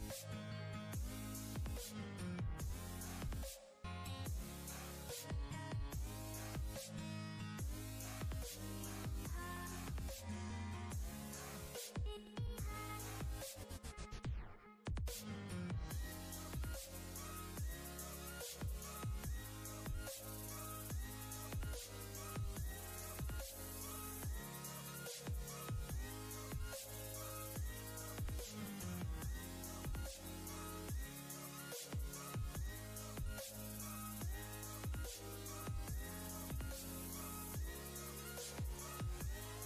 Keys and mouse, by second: 0.0-0.2 typing, 1.4-2.9 typing, 4.6 typing, 5.5-9.0 drag, 15.2 click, 16.9-17.5 ctrl+click, 17.3 ctrl+space, 19.0-20.0 alt+shift+click, 21.6 ctrl+space, 21.7-22.9 ctrl+click, 23.4 click, 26.8 ctrl+space, 27.0 ctrl+click, 27.3-28.4 ctrl+space, 27.8 click, 28.4 space, 29.4-30.9 alt+drag, 31.8 ctrl+a, 32.8-34.3 typing, 35.4-37.5 typing, 38.2 Left.